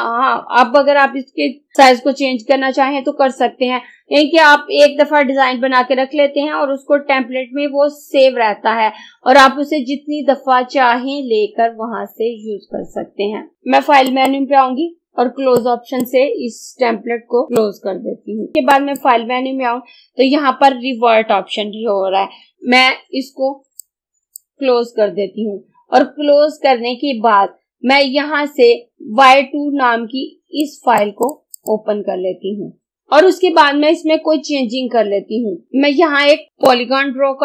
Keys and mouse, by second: 14.2-18.5 drag, 18.7 click, 23.9-26.9 drag, 30.7 click, 36.5-37.4 drag.